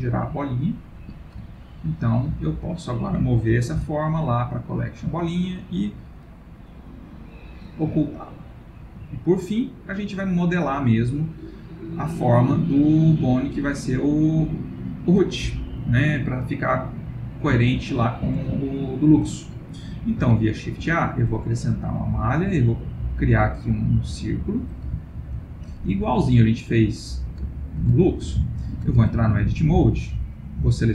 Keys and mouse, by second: 1.5 ctrl+middle click, 1.8 ctrl+middle click, 2.6 click, 3.7 m, 7.3 click, 8.1 ctrl+middle click, 9.7 click, 10.5 middle click, 12.7 ctrl+middle click, 13.3 middle click, 17.2 ctrl+middle click, 18.1 shift+middle click, 18.6 middle click, 20.8 shift+a, 25.0 ctrl+middle click, 25.4 ctrl+middle click, 26.8 click, 27.5 ctrl+middle click, 28.0 shift+middle click, 28.7 ctrl+middle click, 29.0 Tab, 29.5 click, 30.5 shift+click.